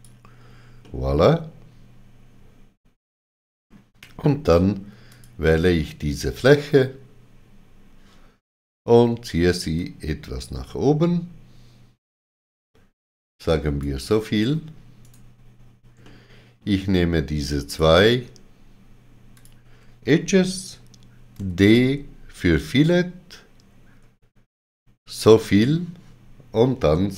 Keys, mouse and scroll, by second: 1.1 middle click, 5.1 click, 9.8 click, 15.1 right click, 16.1 middle click, 17.7 click, 19.4 shift+click, 21.4 d, 25.1 shift+click.